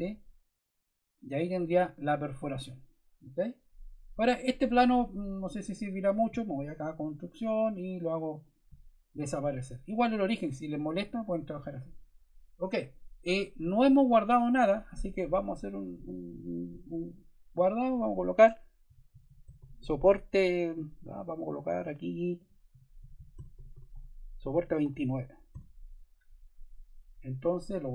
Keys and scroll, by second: 18.5-21.3 typing, 22.4-25.4 typing.